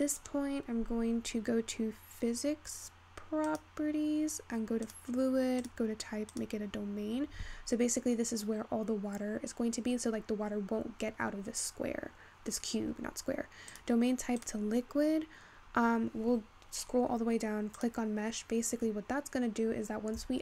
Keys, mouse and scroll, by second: 6.3-20.4 drag.